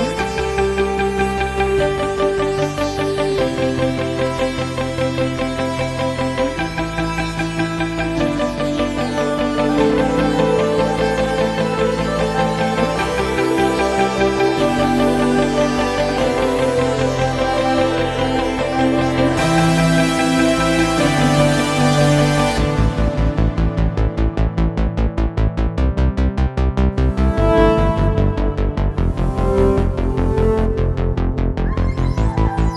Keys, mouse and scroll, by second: 0.0 BackSpace, 1.3 KP_0, 4.1-7.1 middle drag, 9.3 Tab, 11.7 click, 14.5 click, 16.6 g, 27.7-30.9 ctrl+middle drag, 31.4 Tab.